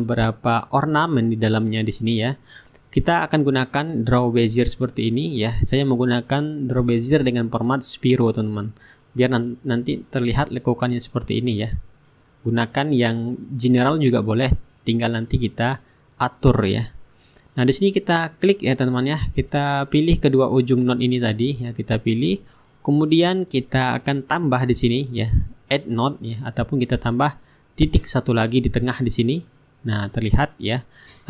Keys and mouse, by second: 0.9-2.7 shift+right drag, 1.4-2.7 drag, 3.5 click, 6.6 ctrl+click, 8.5 ctrl+click, 14.9 Return, 17.4 click, 19.1-22.3 drag, 28.7 click, 30.5 click.